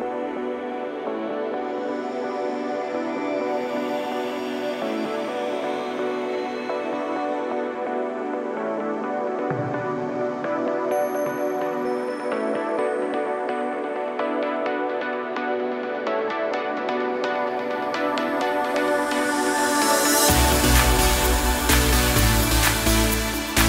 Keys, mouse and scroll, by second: 0.8 click, 1.9 ctrl+z, 2.2 click, 3.3 ctrl+z, 3.6 click, 5.0 s, 6.3 middle click, 7.0 click, 7.2 typing, 7.5 click, 8.6 s, 10.0 click, 11.6 s, 12.6 click, 13.1 middle click, 14.0 KP_0, 14.6 click, 15.8 s, 16.9 middle click, 17.4 middle click, 17.7 scroll down 2, 18.4 s, 20.0 shift+d, 20.6 click, 21.1 scroll down 1, 21.5 click, 23.1 KP_0.